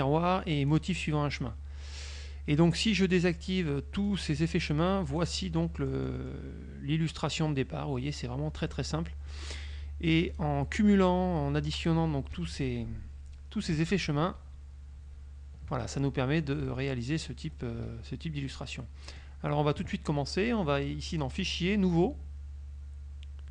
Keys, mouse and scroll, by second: 0.7 click, 2.6 click, 3.3 click, 4.2 click, 5.3 click, 5.9 middle click, 7.6-9.0 middle drag, 10.4 click, 12.5 -, 14.0 ctrl+z, 16.7 KP_Subtract, 17.7-19.5 middle drag, 21.2 click, 21.9 click.